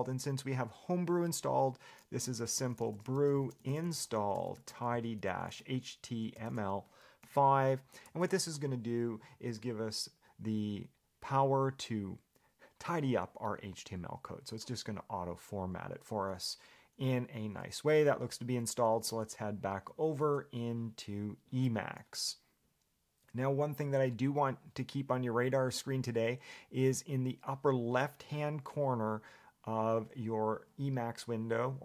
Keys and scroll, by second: 21.8 Escape, 25.1 Escape.